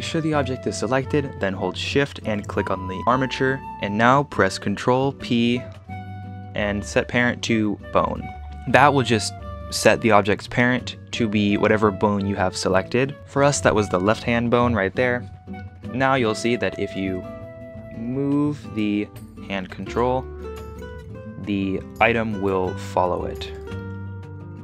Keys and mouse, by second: 5.1 ctrl+p, 9.7 click, 13.2 ctrl+Tab, 16.4 click, 16.8 click, 18.5 click, 20.2-20.6 shift+middle drag, 20.6 g, 22.2 r, 22.5 r, 23.6 click.